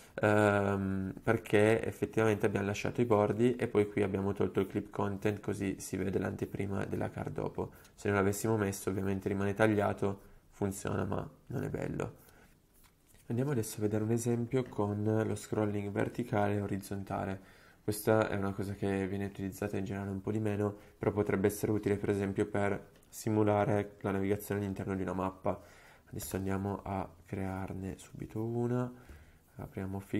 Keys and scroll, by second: 26.4 super+p.